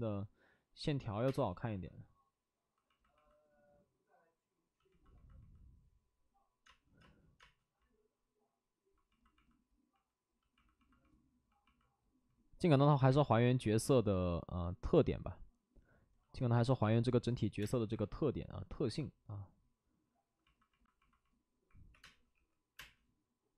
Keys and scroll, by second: 1.1 5, 1.2 space, 6.6 space, 7.3 space, 12.8 ctrl+z, 13.0 space, 17.7 space, 17.7 1, 21.5-23.2 typing.